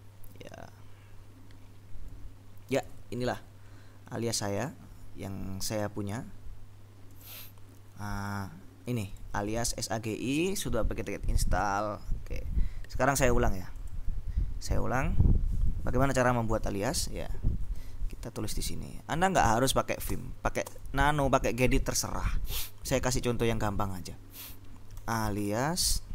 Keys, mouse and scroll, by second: 3.9-4.3 scroll up 2, 4.7 click, 5.9 click, 7.2 click, 8.3 click, 9.3-10.3 drag, 10.5 click, 11.4 click, 13.9 click, 17.8 ctrl+End, 19.5 a, 20.2 Return, 24.9-26.1 typing.